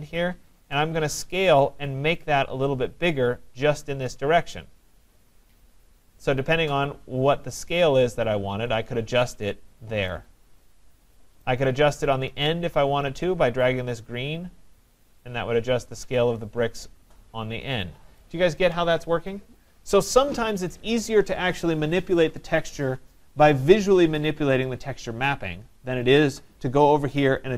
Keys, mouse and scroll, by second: 9.2 click, 11.4 right click, 11.4 click, 18.5-23.3 drag, 24.7 right click.